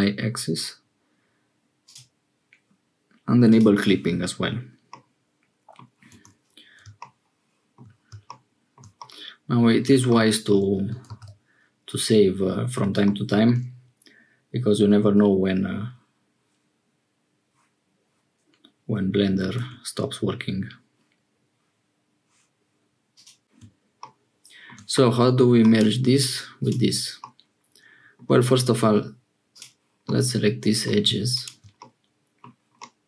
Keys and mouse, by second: 1.8 click, 3.4 click, 4.8 middle click, 6.1 Tab, 8.9 middle click, 11.1 ctrl+s, 19.5 1, 24.9 middle click, 25.7 click, 27.2-28.2 middle drag, 28.4 2, 29.5 click, 30.0 middle click, 31.7 middle click, 32.7 click.